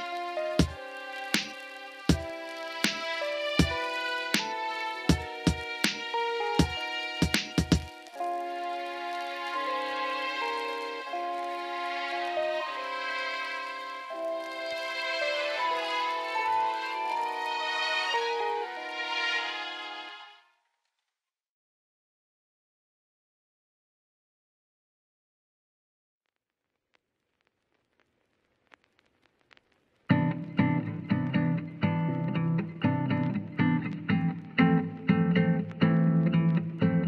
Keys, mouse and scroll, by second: 0.4 click, 1.2-2.7 shift+drag, 3.2 click, 5.1-5.9 middle drag, 6.5 click, 7.9-9.6 drag, 9.8-11.3 middle drag, 11.6-12.6 middle drag, 12.6-13.4 scroll down 1, 13.4 scroll up 1, 13.7-14.1 middle drag, 14.1 scroll down 1, 14.3 shift+middle click, 14.9-15.3 middle drag, 15.3 scroll down 1, 15.8 Tab, 17.2 click, 17.8 alt+shift+click, 18.8 e, 19.7-20.2 z, 20.6 z, 20.6 s, 21.3 click, 21.7 click, 23.3 click, 24.1 e, 25.1-26.0 z, 26.3 alt+z, 29.0 Tab, 29.3 middle drag, 29.7 alt+z, 30.4-31.3 middle drag, 31.8-34.7 drag, 35.5-35.9 drag, 36.2 click.